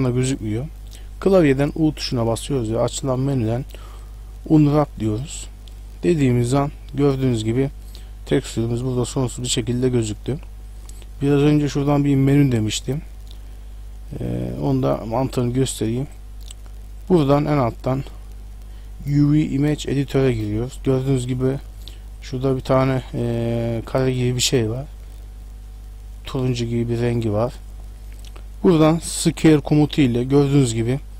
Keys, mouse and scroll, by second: 2.1 u, 5.9 middle click, 7.6 middle click, 11.6 click, 14.8 click, 15.4 click, 17.0 click, 22.2 click, 23.5-24.4 scroll down 7, 29.5 s.